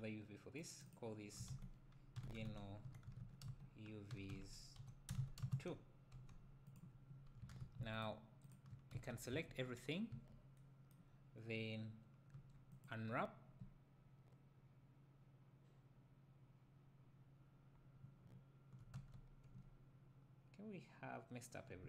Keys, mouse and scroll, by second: 8.0 shift+click, 9.0 Tab, 10.1 a, 18.2 middle click, 19.0 Tab.